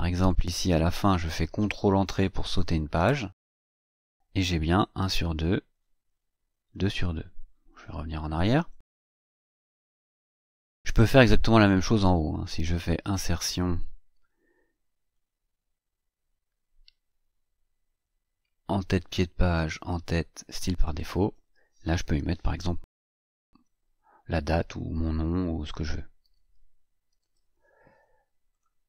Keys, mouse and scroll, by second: 0.1 click, 2.8 ctrl+Return, 4.8-6.6 scroll down 8, 6.6-7.6 scroll up 2, 8.4 BackSpace, 9.6 BackSpace, 10.6-10.9 scroll up 2, 12.8 click, 20.3 click, 26.1-27.7 typing, 28.3 click, 28.7-28.8 scroll down 4.